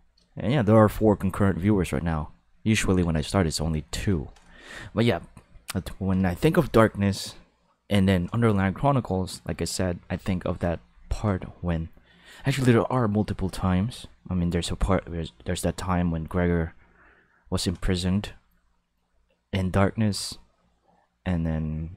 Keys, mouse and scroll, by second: 0.3 shift+middle click, 1.0-3.0 ctrl+middle drag, 3.2 shift+middle click, 4.3 shift+middle click.